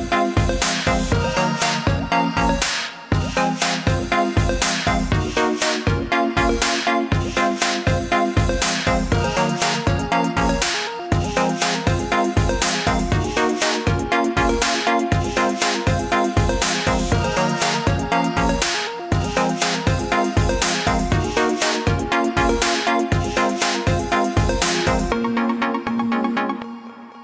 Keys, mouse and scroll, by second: 3.5 click, 5.7 ctrl+z, 6.7 click, 12.8 BackSpace, 15.7-17.1 scroll up 3, 17.1 click, 20.5 BackSpace, 21.7 click, 23.6 BackSpace, 25.4 ctrl+z, 26.8 click.